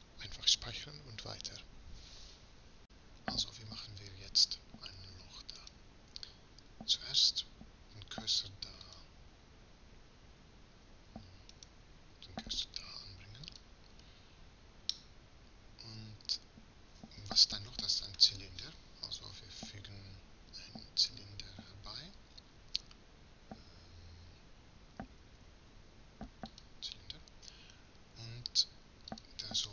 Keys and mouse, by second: 5.8-7.3 right drag, 7.3 shift+s, 11.8 right click, 12.6 shift+s, 15.0-19.2 drag, 19.2 shift+a.